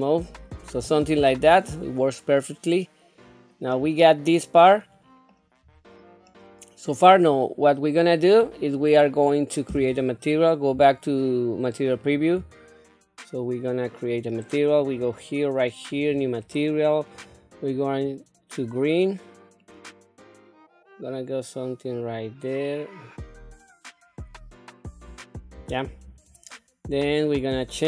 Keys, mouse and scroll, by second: 0.1-3.5 middle drag, 4.7 middle click, 5.6-5.9 scroll up 3, 6.3 middle click, 8.1-8.7 scroll down 1, 10.7 z, 14.8 click, 16.0 click, 17.1 click.